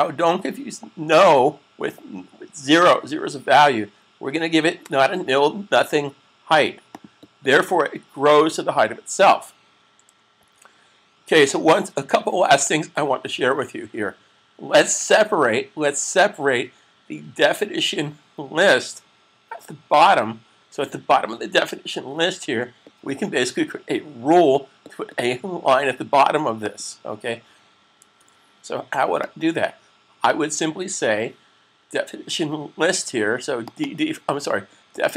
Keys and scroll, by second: 10.3 super+s, 27.9 super+s.